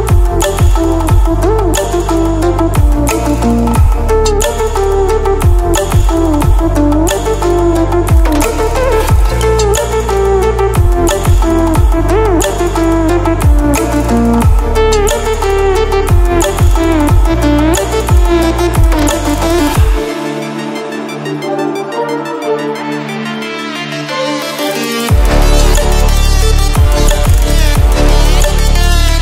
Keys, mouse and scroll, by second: 5.8-9.9 drag, 11.9 ctrl+alt+scroll up 1, 13.1 click, 22.1-25.4 drag, 23.6-24.8 drag, 25.4 ctrl+w.